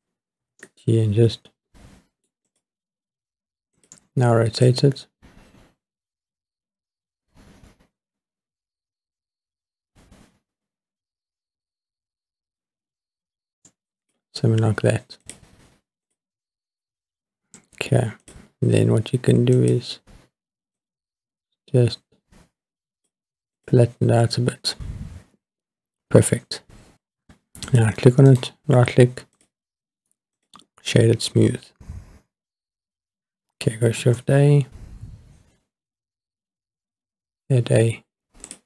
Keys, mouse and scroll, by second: 0.4 g, 0.6 middle click, 2.5 click, 3.8 click, 4.6 click, 15.2 click, 16.1 click, 18.2 click, 19.6 click, 20.8 click, 23.6 click, 25.9-26.7 scroll up 2, 27.7 click, 28.3-29.4 right drag, 30.4 click, 34.0 shift+a.